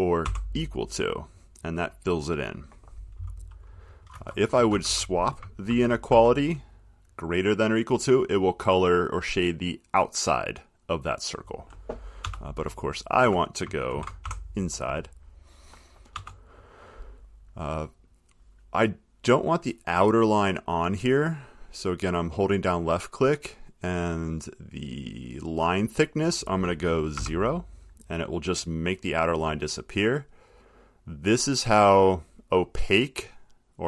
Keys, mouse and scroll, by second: 0.5 =, 4.2 Left, 4.9 Right, 5.9-6.3 typing, 12.4-14.4 typing, 16.3 BackSpace, 21.7 click, 22.9 click, 25.9 click, 27.3 0, 31.9 click.